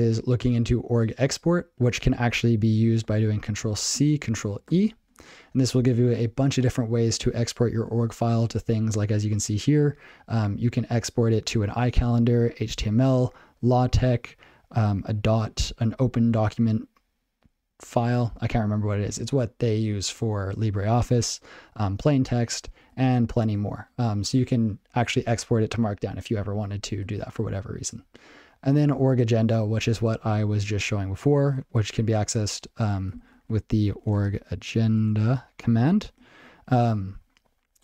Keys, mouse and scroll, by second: 23.4 ctrl+e, 27.6 ctrl+n, 36.1 ctrl+g.